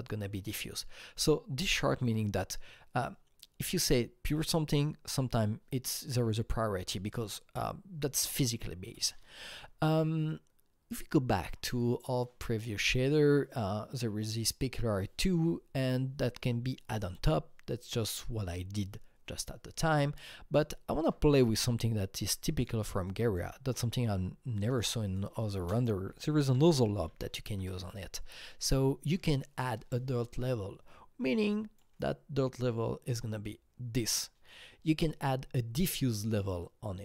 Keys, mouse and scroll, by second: 11.4 Left, 20.0 alt+Tab, 22.3 click, 23.1 click, 23.7-25.5 alt+middle drag, 24.5 click, 25.0 click, 25.7 ctrl+space, 25.7 click, 25.8-27.1 typing, 27.5 Return, 28.4-36.4 drag, 31.2-31.8 drag.